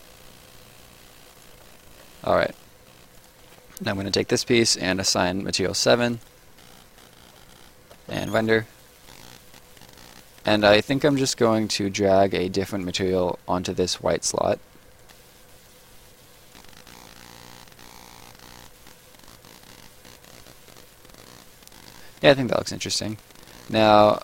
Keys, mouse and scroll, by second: 1.2 ctrl+shift+click, 2.3 Escape, 3.1 click, 5.0 7, 6.1 click, 7.9 space, 9.1 right click, 11.1 right click, 12.7 click, 15.0 click, 15.8-16.3 scroll down 1, 16.5 click, 18.8 scroll down 1, 19.0 right click, 22.8 right click.